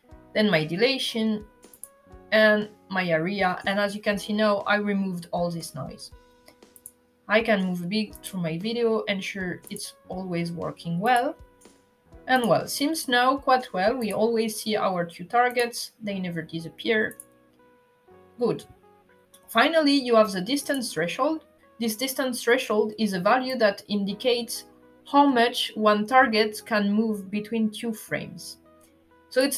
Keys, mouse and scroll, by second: 1.4 click, 6.5 click, 7.8 click, 9.4 click, 10.7 click, 12.0 click, 13.7 click, 15.2 click, 16.8 click, 20.3 click, 28.9 click.